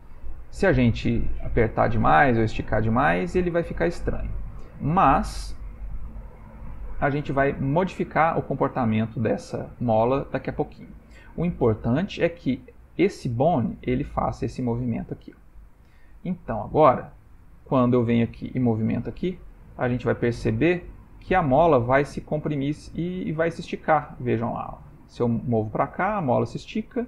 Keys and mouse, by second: 5.7 middle click, 7.7 middle click, 8.7 middle click, 9.0 middle click, 9.1 middle click, 9.3 middle click, 10.6 middle click, 11.8 g, 15.4 ctrl+middle click, 16.4 middle click, 17.8 click, 18.8 g, 25.9 middle click.